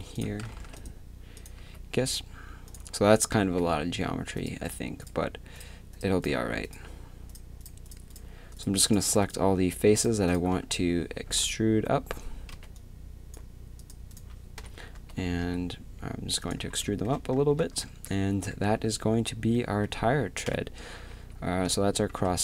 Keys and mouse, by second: 0.3 a, 0.6 ctrl+r, 1.6 2, 2.7-4.1 drag, 3.6 2, 10.5 z, 11.2 z, 12.5 c, 14.2 click, 14.6 KP_1, 15.0 z, 15.4 e, 16.7 a, 17.9 Tab, 18.7 a, 20.5 KP_7, 21.1 z.